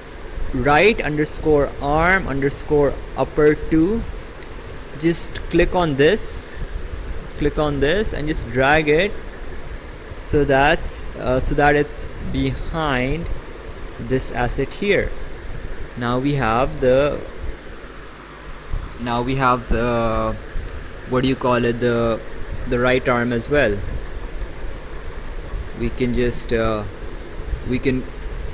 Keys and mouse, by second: 0.3 click, 4.8 click, 7.9 click, 22.6 ctrl+click, 24.0 ctrl+click, 26.3 click, 28.4 click.